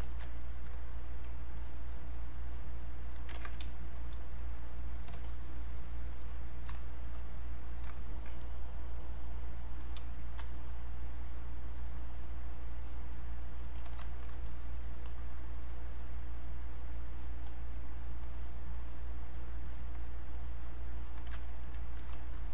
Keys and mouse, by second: 0.3 ctrl+right click, 1.6 ctrl+click, 3.3 ctrl+z, 3.6 space, 4.0 click, 5.2 shift+click, 6.1 shift+click, 9.8 click, 10.6 alt+click, 13.9 click, 14.4-16.3 shift+drag, 16.3 click, 20.5 alt+click, 21.5 ctrl+right click, 22.0 click.